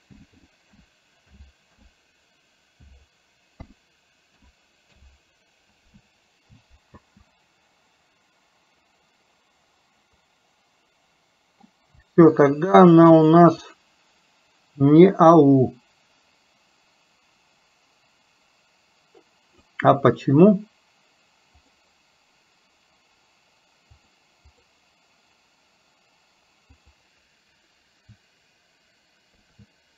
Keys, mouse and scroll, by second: 10.3-11.8 middle drag, 13.2 click, 13.8-19.8 drag, 23.9 click, 24.6 click, 27.0-29.9 drag.